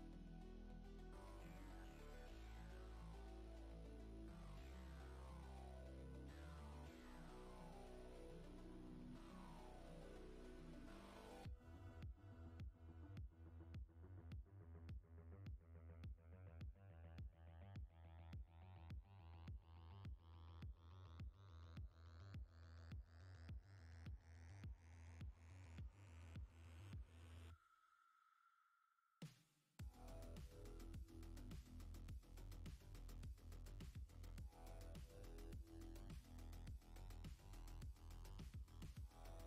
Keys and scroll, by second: 17.5 ctrl+z.